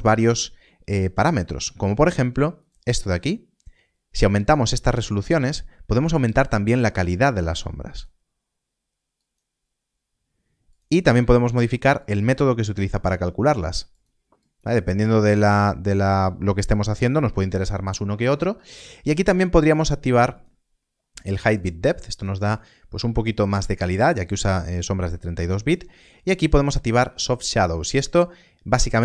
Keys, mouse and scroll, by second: 10.7 click.